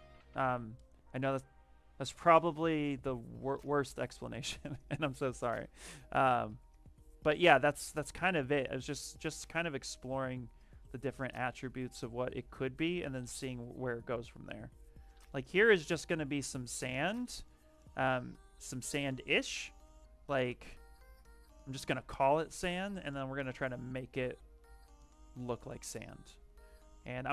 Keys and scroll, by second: 4.6 w, 6.6 ctrl+z, 12.2 q, 13.0 w, 16.6 q, 23.7 shift+f.